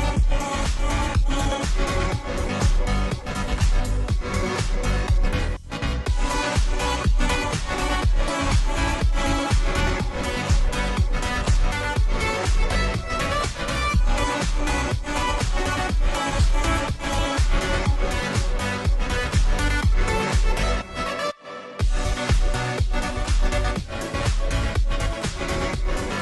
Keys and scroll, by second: 2.9 space, 19.0 ctrl+g, 20.7 2, 21.9 BackSpace, 22.0 BackSpace, 24.0-25.5 typing.